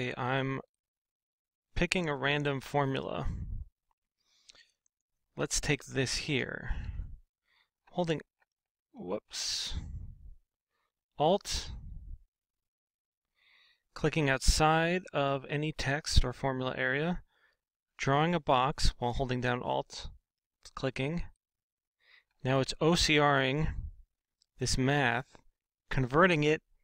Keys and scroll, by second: 8.7 alt+Tab, 9.2 alt+Tab.